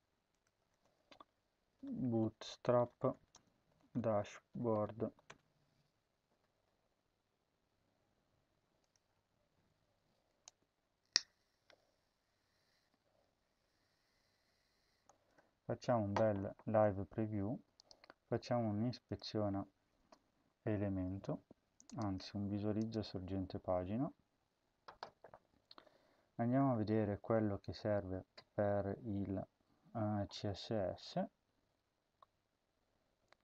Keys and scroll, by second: 0.6-5.5 typing.